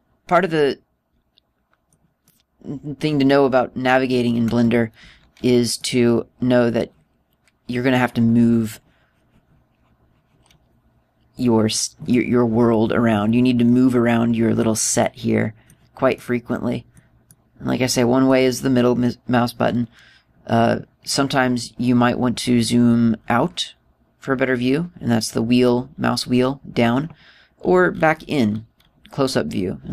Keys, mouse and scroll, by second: 0.3 middle click, 2.8 middle click, 3.8 middle click, 6.3 middle click, 12.6 middle click, 15.5 middle click, 16.7 middle click, 17.8 middle click, 18.7 middle click, 23.7-26.3 scroll down 5, 26.3-26.6 scroll down 3, 26.6-26.9 scroll up 2, 26.9 scroll down 1, 27.0-27.7 scroll down 2, 28.1-29.9 scroll up 15.